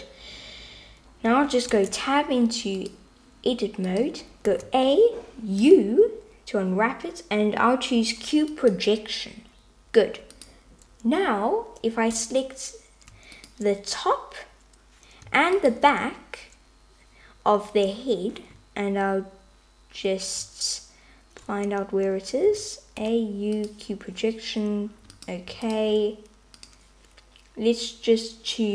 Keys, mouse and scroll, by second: 1.8 Tab, 2.9-4.5 drag, 4.5 a, 5.7 u, 10.4-12.1 drag, 13.4-14.9 drag, 15.6-17.4 shift+drag, 22.5 a, 23.1 u, 26.6-27.7 drag.